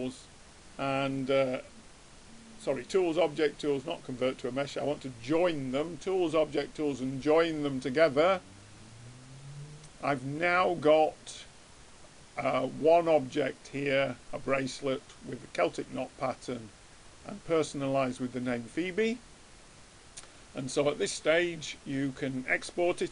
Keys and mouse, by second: 3.0-4.8 drag, 10.2 middle click, 16.5-20.0 middle drag, 20.3-22.1 drag.